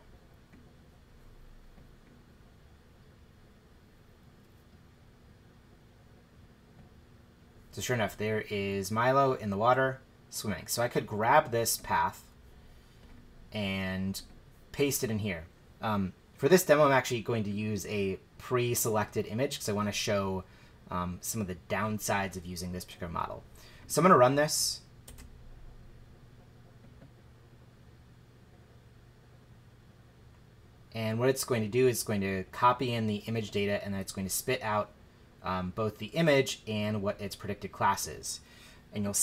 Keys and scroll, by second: 25.1 shift+Return.